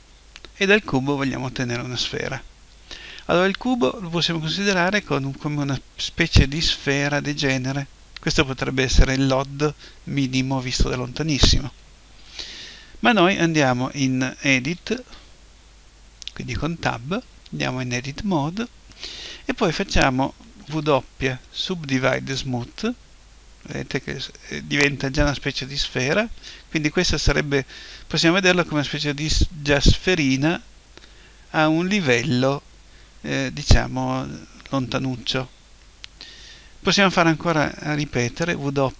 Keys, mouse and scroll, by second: 0.0-3.3 middle drag, 14.9 Tab, 20.7 w, 38.1 w.